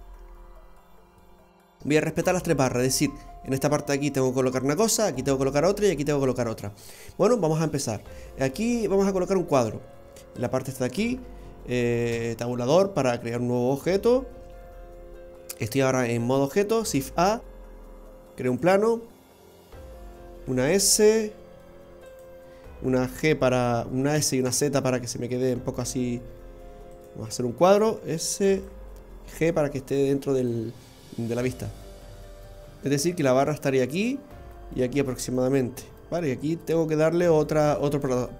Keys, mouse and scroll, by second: 10.3 click, 12.1 Tab, 17.1 shift+a, 20.6 s, 24.1 s, 28.5 s, 30.0 g.